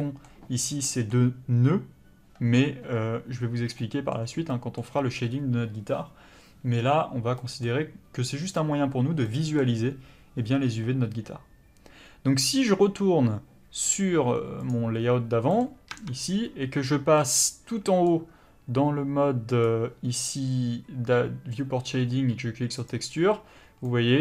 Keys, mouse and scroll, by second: 14.6 click, 15.6 middle click, 15.9 Tab, 22.8 click, 23.8 middle click.